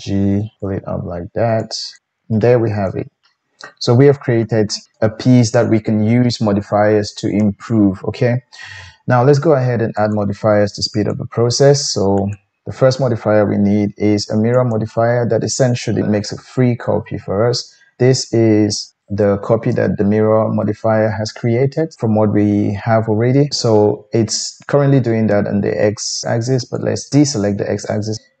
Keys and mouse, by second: 0.1 g, 0.6 middle click, 1.6 click, 2.0-9.9 shift+middle drag, 2.0 g, 9.9-11.1 drag, 11.1-12.2 middle drag, 12.2-26.7 drag, 26.7-28.1 middle drag, 28.1-28.4 drag.